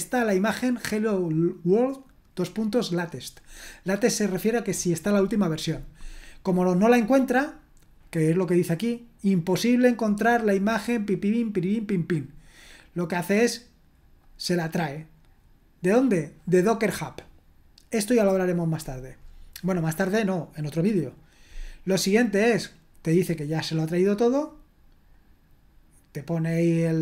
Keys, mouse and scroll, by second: 0.9-3.4 drag, 3.7 click, 3.9 click, 8.7-12.6 drag, 13.4 click, 15.1-16.4 drag, 23.1-24.2 drag, 25.2-26.3 drag.